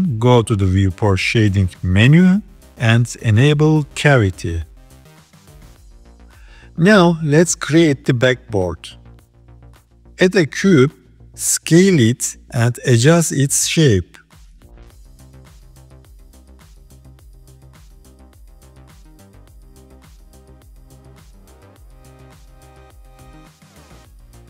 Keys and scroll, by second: 10.0 shift+a, 13.8 s, 15.7 g, 16.6 KP_3, 17.7 s, 20.6 KP_3, 21.4 s, 22.9 g.